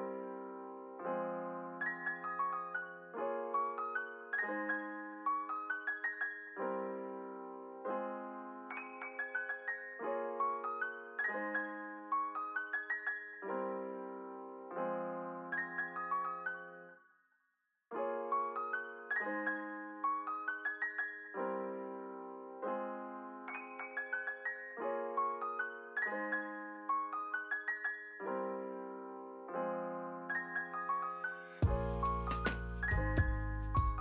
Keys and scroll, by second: 4.5 KP_Multiply, 5.5 BackSpace, 5.6 KP_Subtract, 6.1 2, 6.2 Return, 10.3 ctrl+c, 10.6 ctrl+v, 21.0 ctrl+c, 21.2 ctrl+v, 24.5 ctrl+c, 24.7 ctrl+v, 26.5 Up, 29.7 ctrl+c, 29.9 ctrl+v, 31.6 ctrl+v.